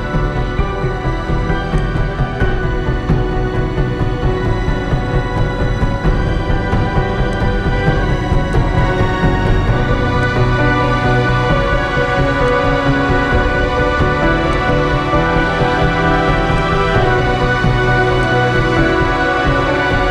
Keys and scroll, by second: 4.4 ctrl+z.